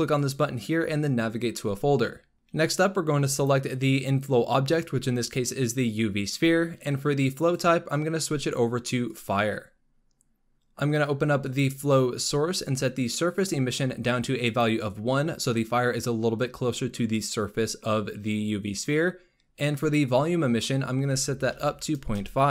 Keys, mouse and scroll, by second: 0.1-2.3 drag, 3.2 click, 7.3-10.4 drag, 11.3-14.5 drag, 19.7-22.5 drag.